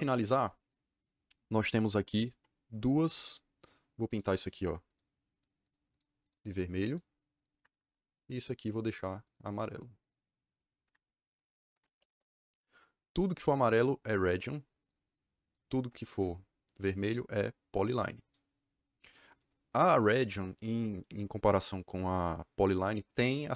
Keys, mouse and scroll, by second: 4.0 click, 4.8 click, 5.6 click, 5.8 click, 6.2 click, 6.8 click, 7.3 click, 7.5 Escape, 7.6 Escape, 8.1 click, 8.5 click, 9.2 click, 9.9 click, 10.7 Escape, 11.7 m, 12.0 Return, 13.3 click, 13.6 click, 14.7 click, 15.3 click, 16.0 KP_Enter.